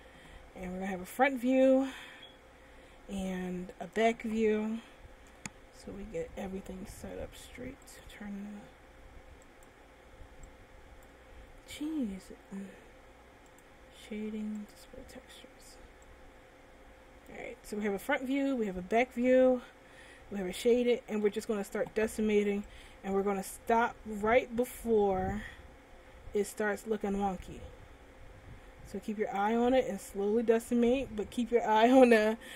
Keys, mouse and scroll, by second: 1.0-1.3 scroll down 2, 2.1 shift+middle click, 5.4 scroll up 1, 7.2 n, 8.2 click, 8.8 n, 9.7 click, 10.7 click, 12.3-13.5 scroll down 5, 13.7 click, 14.9 click, 16.3 click, 18.9 scroll up 1, 19.9 middle click, 24.2 click.